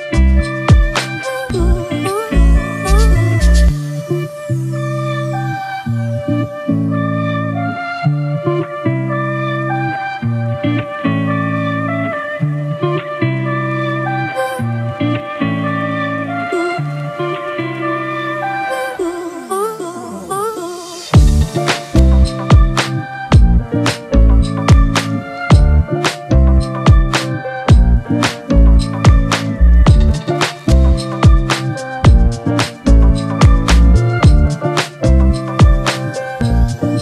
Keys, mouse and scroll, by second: 13.1 double click.